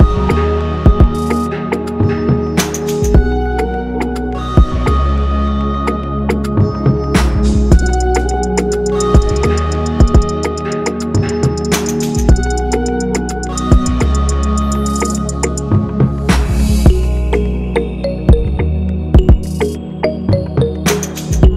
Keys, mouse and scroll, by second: 0.0 scroll up 3, 0.0 shift+click, 0.1 scroll down 1, 0.2 shift+click, 0.2 g, 0.6 click, 3.3 click, 3.4 scroll down 2, 3.4 g, 5.8 click, 5.8 KP_7, 5.9 scroll down 4, 6.0 g, 9.4 click, 10.6 click, 17.7 shift+click, 18.3 scroll down 5, 18.4 click.